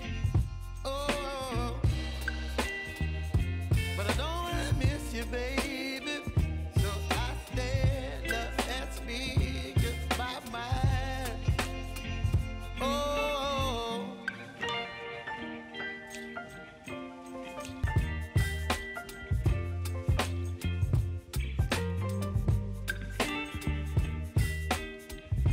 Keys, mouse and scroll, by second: 0.2 ctrl+c, 1.5 k, 2.0 click, 2.6 ctrl+v, 3.4 u, 3.7 space, 7.1 click, 9.9 click, 10.0-11.8 typing, 12.1 click, 13.2 space, 14.9-18.5 drag, 21.5 click, 22.2 space, 24.4-25.5 drag.